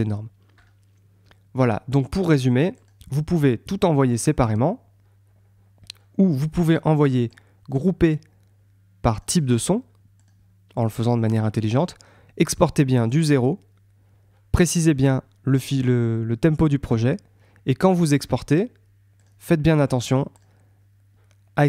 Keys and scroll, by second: 1.9 super+Tab.